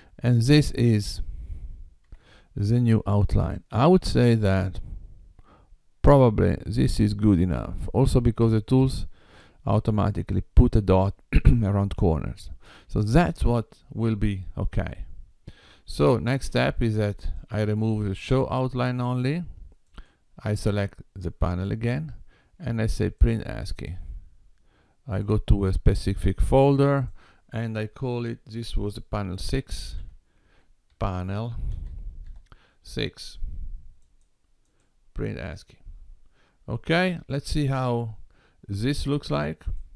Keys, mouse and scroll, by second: 0.4 click, 2.1 g, 17.4 click, 19.9 click, 23.0 click.